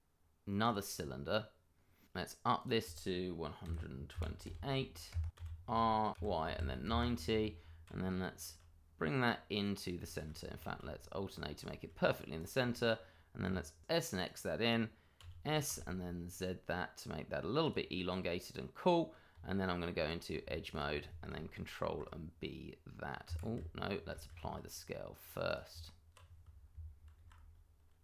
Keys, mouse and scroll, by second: 0.6 click, 1.0-1.7 scroll down 1, 1.7-2.5 scroll up 1, 3.5 click, 3.6-6.4 typing, 5.1 KP_Enter, 6.9 KP_Enter, 7.8 g, 9.8 click, 10.6 alt+a, 11.2 scroll up 1, 11.7 shift+middle click, 12.0 click, 12.5 double click, 12.6-14.1 scroll up 1, 14.1 middle click, 14.3-15.7 typing, 15.1 click, 17.6 click, 17.9 middle click, 19.3 Tab, 20.7 alt+click, 20.7 click, 21.8 ctrl+b, 23.2 Escape, 23.5 Tab, 24.2 ctrl+a, 25.4 click, 25.7 Tab, 27.2 ctrl+b.